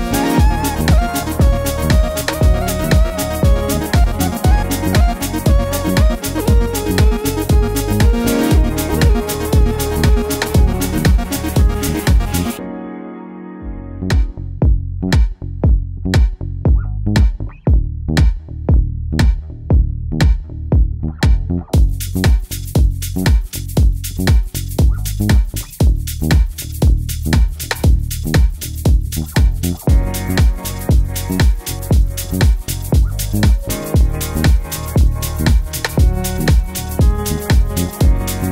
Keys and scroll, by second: 34.2 Right, 34.3 Right, 34.4 typing, 34.5 Right, 34.5 Right, 34.8 Left.